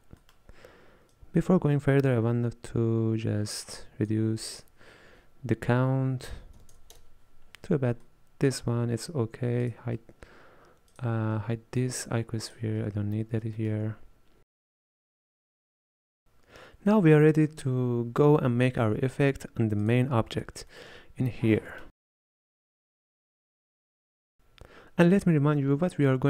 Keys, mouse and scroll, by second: 1.2-7.6 drag, 8.1-9.7 middle drag, 9.7 click, 11.0 click, 12.5 click, 13.6 shift+middle click, 14.4 click, 14.8 middle click, 15.5 scroll down 4, 15.7 middle click, 19.9 click, 20.8 shift+middle click, 21.3-21.8 scroll up 3, 21.8 middle click, 21.9 click, 22.3-26.2 shift+middle drag.